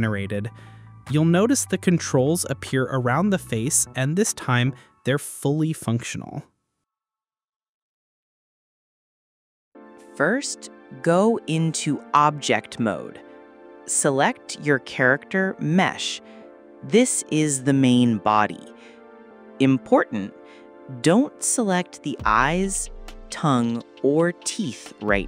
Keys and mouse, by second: 4.1 click, 15.1 click, 23.1 click, 24.1-25.1 middle drag, 25.1 click.